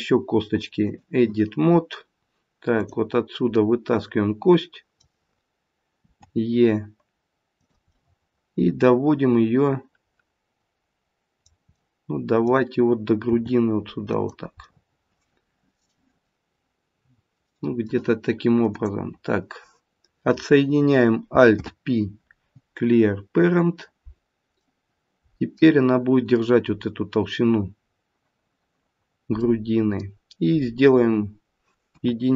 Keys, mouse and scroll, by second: 2.7 click, 3.5 middle click, 6.0 e, 7.9 middle click, 11.2 middle click, 11.7 middle click, 13.3 g, 14.6 middle click, 15.5 middle click, 21.5 alt+p, 24.6 middle click, 24.8 middle click, 29.4 middle click, 31.8 KP_1.